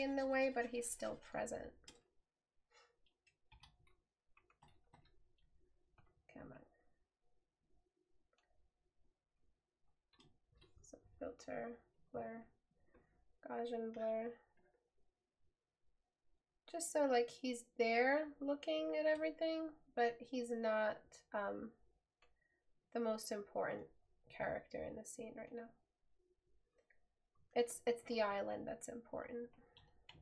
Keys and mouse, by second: 3.7 right click.